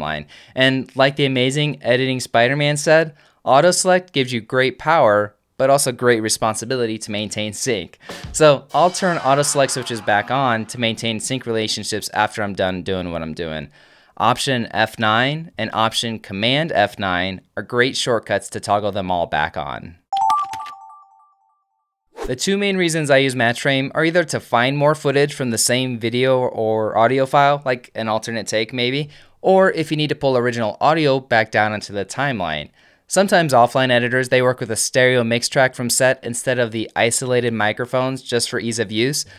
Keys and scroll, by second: 15.3 alt+F9, 17.3 alt+super+F9, 35.3 x, 36.3 f.